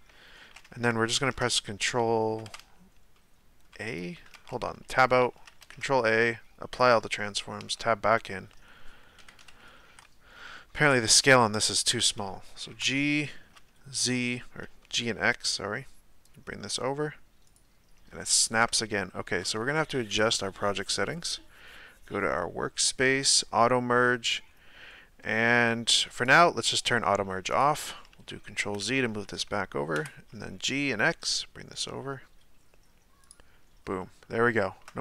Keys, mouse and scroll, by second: 1.1 ctrl+a, 3.1-4.3 middle drag, 4.3 Tab, 5.0-5.6 scroll down 1, 5.6 ctrl+a, 7.6 Tab, 8.1-9.2 middle drag, 9.2 KP_1, 9.4 KP_Decimal, 9.9 g, 11.3-11.7 scroll down 1, 11.7-12.7 shift+middle drag, 12.7 g, 18.3 shift+middle click, 18.9-20.1 scroll down 2, 20.1 click, 26.2 click, 28.1 ctrl+z, 29.9 g, 34.0-35.0 shift+middle drag.